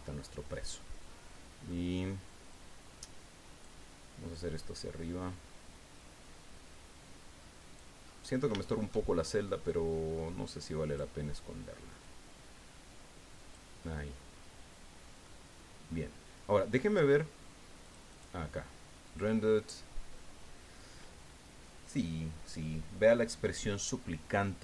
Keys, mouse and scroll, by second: 1.3 click, 2.5-3.8 drag, 4.3-7.9 drag, 8.0-8.4 scroll up 1, 8.6 shift+click, 9.6-11.1 drag, 12.0-13.7 drag, 13.8-15.4 drag, 15.6 scroll down 1, 16.7 scroll up 1, 17.8 click, 19.0 click.